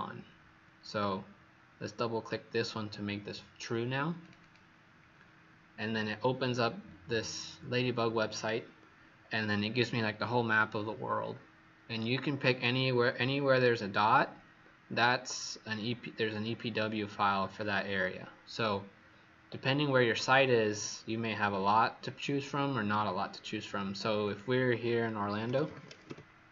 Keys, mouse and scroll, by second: 4.4 click, 24.2 click, 25.2-26.5 typing.